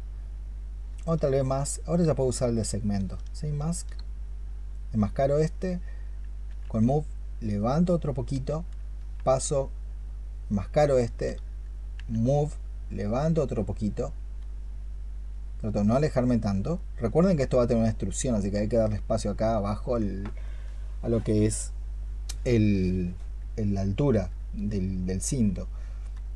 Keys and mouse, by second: 0.7-3.7 space, 6.3 w, 8.8 q, 11.8 w, 20.3 alt+click, 26.2 q.